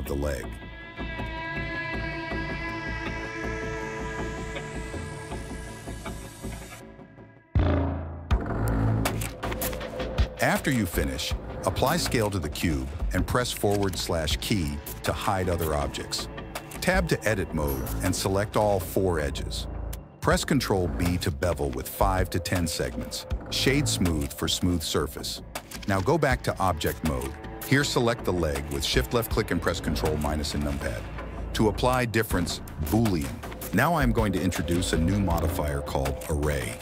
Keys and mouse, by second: 0.9 KP_7, 2.3 r, 4.1 r, 6.7 s, 7.2 g, 8.3 g, 10.8 ctrl+a, 12.1 /, 13.2 Tab, 14.7 click, 15.4 click, 16.4 click, 17.3 shift+click, 18.5 shift+middle click, 19.1 shift+middle click, 19.7 ctrl+b, 22.5 Tab, 23.0-24.6 drag, 25.2 i, 27.7 shift+middle click, 28.6 ctrl+KP_Subtract, 34.0 ctrl+z, 35.7 click, 36.4-36.8 drag.